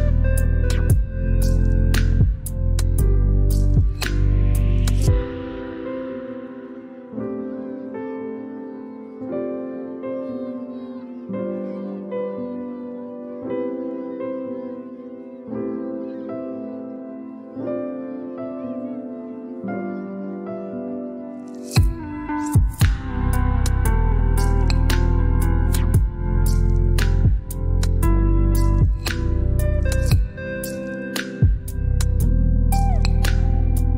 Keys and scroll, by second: 0.5 typing, 3.7 typing, 4.2 shift+Down, 5.8 Down, 6.0 Down, 9.2 shift+Down, 9.9 Up, 10.2 Up, 12.9 Down, 13.2 Down, 18.8 Up, 20.0 Down, 20.2 Down, 28.4 typing, 31.6 typing, 32.3 ctrl+BackSpace.